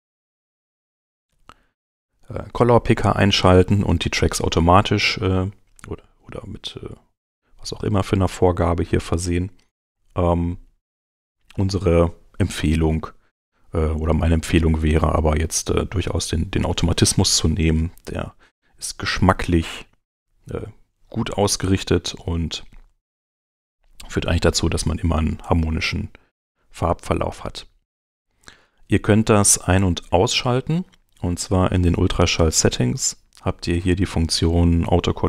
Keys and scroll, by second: 1.3 alt+c, 15.4 super+a, 26.3 9, 27.3 BackSpace, 28.0 Return, 31.4 shift+,.